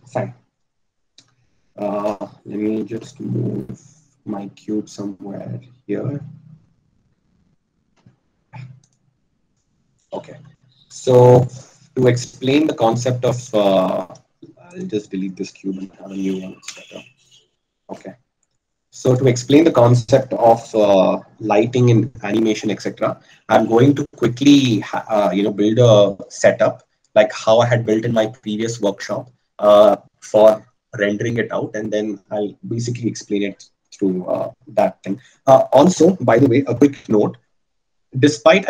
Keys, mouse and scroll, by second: 3.8 g, 5.6 click, 8.0 g, 10.6 a, 16.5 x, 18.8 shift+a.